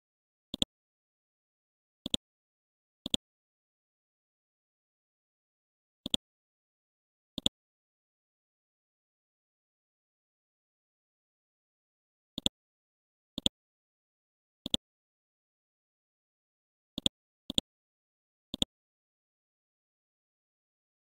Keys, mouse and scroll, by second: 0.6 click, 0.9 scroll down 1, 1.5 scroll up 1, 2.0 click, 3.7 ctrl+click, 4.9 scroll up 1, 6.1 click, 7.4 ctrl+click, 9.1 scroll down 1, 9.8 scroll up 1, 10.3 scroll down 1, 11.3 scroll up 1, 12.5 ctrl+click, 12.8 scroll up 1, 13.4 click, 14.7 ctrl+click, 17.0 ctrl+click, 18.5 ctrl+click.